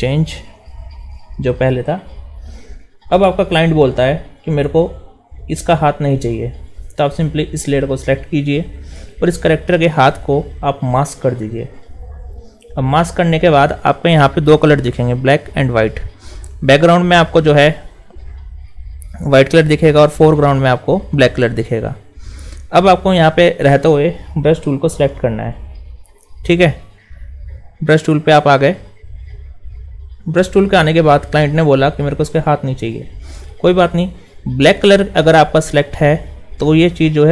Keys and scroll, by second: 0.6 alt+shift+s, 1.4 alt+shift+?.